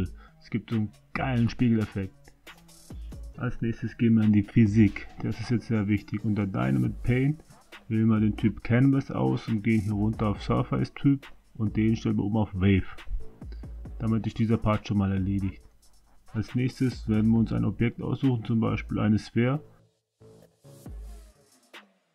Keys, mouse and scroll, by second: 1.4 click, 3.1-4.4 middle drag, 6.5 click, 7.8 click, 13.5-14.7 drag, 15.4 click, 17.6 a, 17.8 a, 18.6 a, 21.4 s.